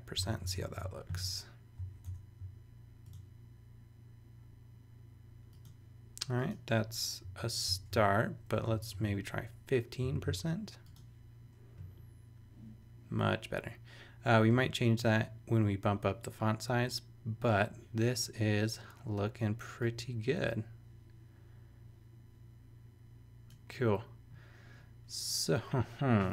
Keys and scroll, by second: 0.2 shift+;, 0.5 super+s, 2.0 super+Return, 7.2 Down, 7.8 super+BackSpace, 8.5 Left, 9.1 i, 10.0 super+i, 10.1 super+s.